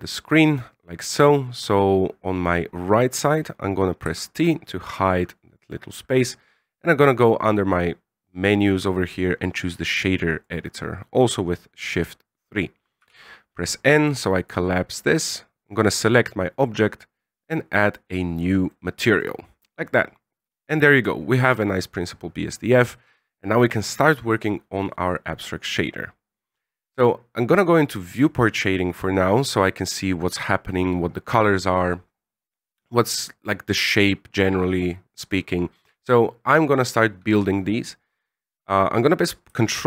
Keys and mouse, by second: 4.0 t, 7.2-10.4 drag, 13.0 n, 15.2 right click, 17.9 click, 18.8 middle click, 19.7 middle click, 22.8 click, 28.1 click, 38.6 click.